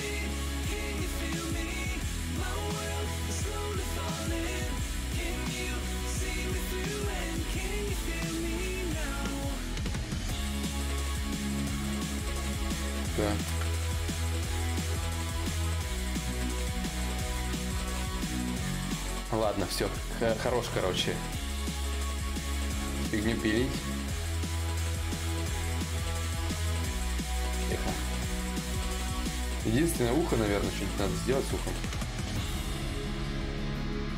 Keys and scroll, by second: 6.8 ctrl+z, 6.9 ctrl+z, 7.2 ctrl+z, 7.5 ctrl+z, 7.8 ctrl+z, 8.1 ctrl+z, 9.4 Escape, 32.8 b.